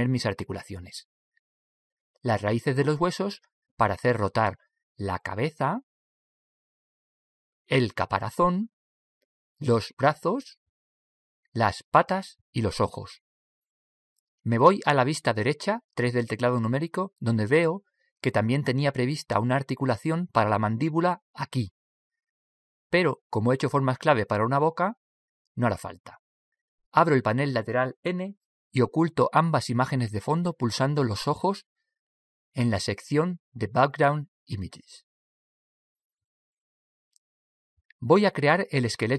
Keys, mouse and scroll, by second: 16.7 KP_3, 28.9 n, 30.2 click, 34.7-37.6 drag.